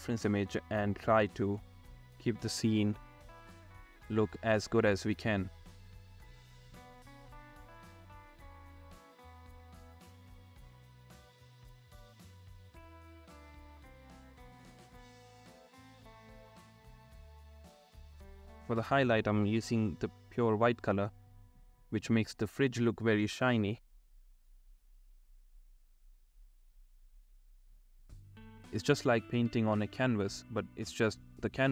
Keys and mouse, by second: 0.0-6.8 typing, 0.0 ctrl+z, 0.3 click, 0.8 ctrl+z, 1.0 ctrl+z, 4.6 ctrl+z, 5.0 ctrl+z, 6.0 ctrl+z, 6.4 ctrl+z, 6.7 ctrl+z, 6.8 ctrl+z, 7.1 ctrl+z, 8.3-11.7 typing, 9.6 ctrl+z, 10.0 ctrl+z, 10.5 ctrl+z, 10.9 ctrl+z, 11.4 ctrl+z, 13.8 ctrl+z, 14.1 ctrl+z, 14.1 ], 14.5 [, 14.7 ctrl+z, 14.7 ], 15.1 ctrl+z, 15.9 ctrl+z, 15.9 ], 16.4 [, 16.5 ], 16.9 ], 18.1 ctrl+z, 18.2-29.4 typing, 18.5 ctrl+z, 18.7 ctrl+z, 19.6 ctrl+z, 20.3 ctrl+z, 21.1 ctrl+z, 21.5 ctrl+z, 21.6 middle click, 21.9 ctrl+z, 24.1 ctrl+z, 25.8 ctrl+z, 26.0 ctrl+z, 26.4 ctrl+z, 27.4 ctrl+z, 28.1 ctrl+z, 28.2 ctrl+z, 28.5 ctrl+z, 29.9 ctrl+z, 30.7 ctrl+z.